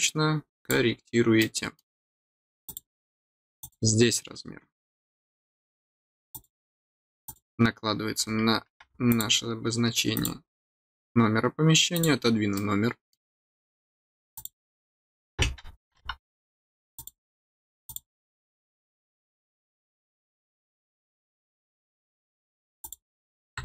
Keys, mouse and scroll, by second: 0.5 click, 1.3 middle click, 2.6 click, 3.6 click, 6.3 click, 7.2 click, 9.0 click, 10.1 click, 11.9 click, 12.5 middle click, 13.6 scroll up 1, 14.3 click, 16.9 click, 17.8 click, 22.8 click.